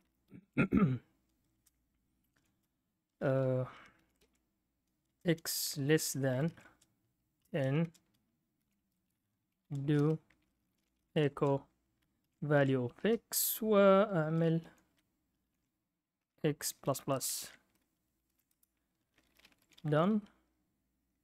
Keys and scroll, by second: 0.0-0.9 typing, 2.3 typing, 3.7-17.4 typing, 8.8 Return, 13.0 Return, 18.5 Return, 19.2-20.4 typing.